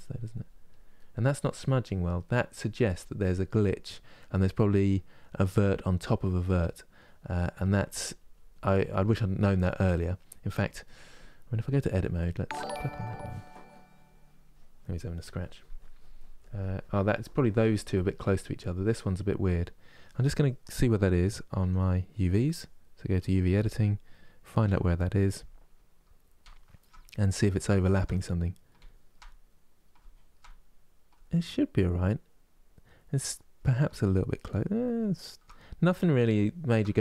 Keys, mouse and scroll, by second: 0.6 middle click, 1.3-6.1 drag, 6.1 middle click, 7.0-12.4 drag, 12.6-22.9 middle drag, 22.9 click, 36.1-37.0 shift+middle drag.